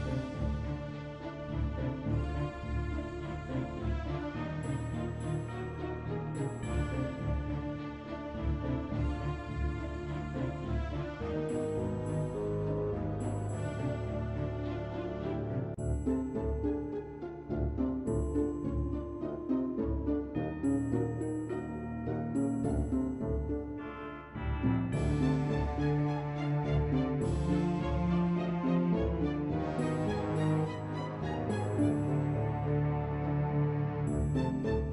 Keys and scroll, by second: 24.3 ctrl+w, 28.6 ctrl+w, 31.4 ctrl+w.